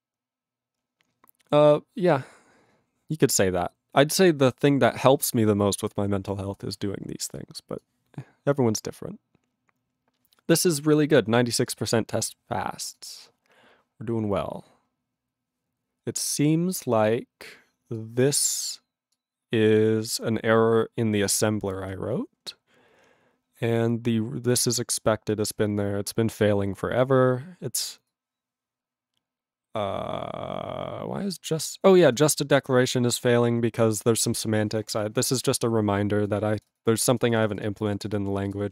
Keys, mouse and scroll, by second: 38.5 click, 38.5 click.